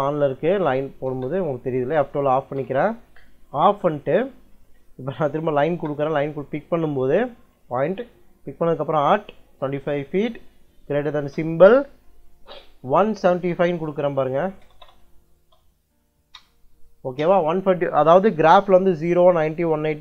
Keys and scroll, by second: 0.9 space, 2.4 F12, 3.3 Escape, 5.3 l, 5.5 space, 8.4 shift+2, 9.5 2, 10.0 ', 11.0 shift+,, 12.8 1, 14.5 BackSpace, 15.3 5, 16.2 Return.